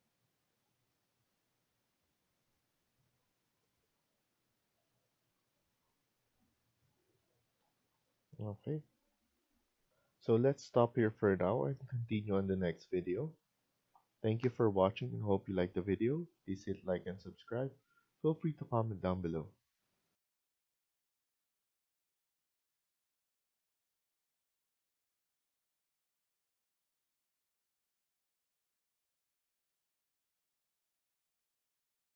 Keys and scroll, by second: 1.0 Escape, 3.8 Escape, 7.1 Escape, 7.5 Escape, 9.8 F1.